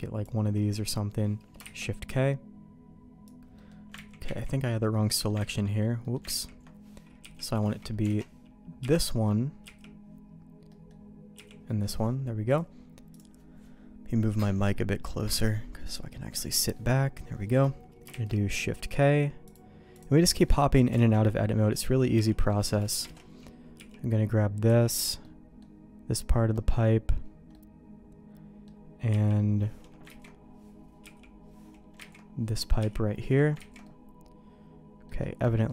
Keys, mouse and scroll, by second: 1.6 shift+k, 3.5 middle click, 4.0 ctrl+z, 4.3 ctrl+z, 5.1 middle click, 5.6 ctrl+z, 6.0 middle click, 6.6 ctrl+z, 7.2 l, 7.5 middle click, 8.1 alt+a, 8.8 l, 9.6 l, 10.7 middle click, 11.1 click, 11.3 click, 11.7 middle click, 12.5 click, 16.8 middle click, 18.1 shift+k, 18.8 middle click, 19.5 click, 20.3 middle click, 20.9 alt+a, 22.1 l, 23.0 alt+a, 23.7 l, 24.6 l, 25.2 middle click, 26.5 middle click, 27.5-28.6 middle drag, 29.1 l, 30.1 ctrl+z, 31.0 l, 32.1 ctrl+z, 32.8 l, 33.6 ctrl+z, 33.8-35.0 middle drag, 35.4 middle click.